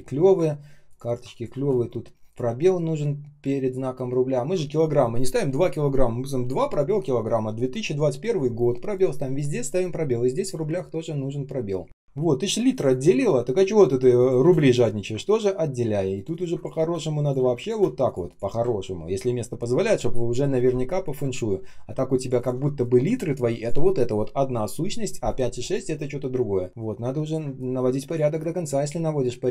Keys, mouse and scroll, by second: 0.4-0.8 ctrl+scroll up 1, 1.0 ctrl+click, 1.5 space, 2.5-4.6 ctrl+scroll down 1, 10.5 space, 11.0 space, 12.0 ctrl+scroll up 1, 12.8 ctrl+click, 14.3 space, 15.2-15.7 ctrl+scroll down 1, 15.7 ctrl+scroll up 1, 16.2 ctrl+click, 16.7 space, 17.3 space, 17.6 space, 18.7 ctrl+scroll down 1, 19.0 ctrl+s, 19.4-20.6 ctrl+scroll up 1, 21.5 ctrl+scroll up 1, 22.3 ctrl+click, 26.4-27.2 ctrl+scroll down 1, 27.3 space, 27.9 space, 29.1 ctrl+scroll up 1.